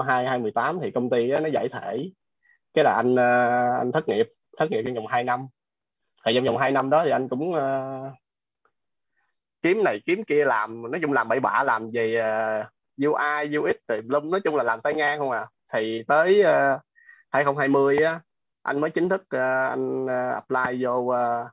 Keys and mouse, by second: 8.3 click, 11.2 space, 12.8 click, 20.4 click.